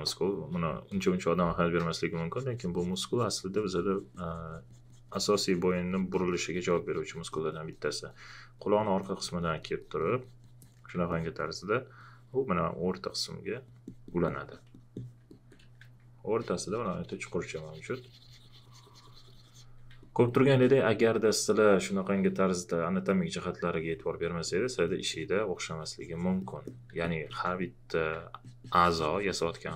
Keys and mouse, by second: 11.1 alt+click, 16.4 alt+click, 20.0 alt+click, 25.7 alt+click.